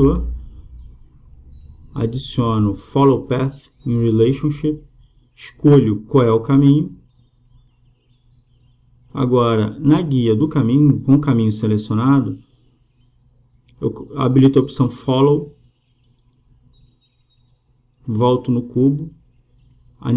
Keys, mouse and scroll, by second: 0.0-1.9 right drag, 2.4-3.8 drag, 7.9-9.4 drag, 9.9-11.8 right drag, 11.8-13.4 drag, 13.4-15.8 middle drag, 15.8 click, 16.3-18.2 right drag, 17.6-20.1 drag.